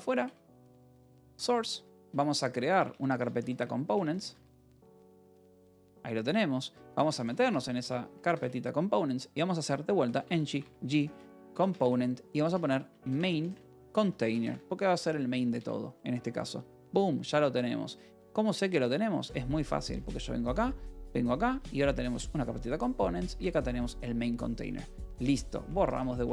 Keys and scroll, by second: 0.0-7.9 typing, 8.1 Tab, 8.3 Return, 9.6-15.5 typing, 18.0 w, 18.6 BackSpace, 19.2 w, 19.9 :, 21.4 j, 22.1 Return, 24.5-26.3 typing, 25.9 Return.